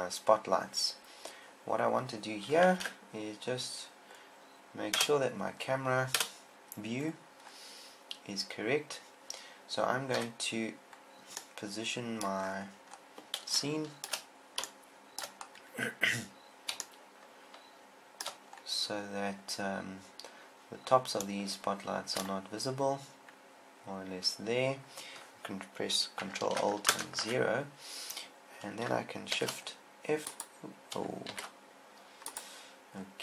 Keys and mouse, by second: 3.2 ctrl+Up, 5.4 KP_0, 6.7 KP_0, 10.6 KP_1, 27.4 ctrl+alt+KP_0, 29.7 shift+f, 31.7 shift+f.